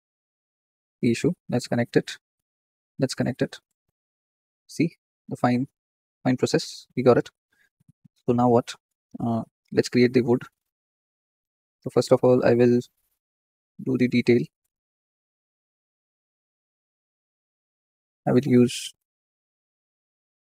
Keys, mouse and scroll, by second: 0.2 ctrl+z, 0.7 click, 1.9-4.1 drag, 4.1-5.5 middle drag, 5.5-7.4 drag, 6.1 middle click, 9.4 Tab, 10.1 scroll up 1, 10.2-13.5 middle drag, 13.5-20.4 drag.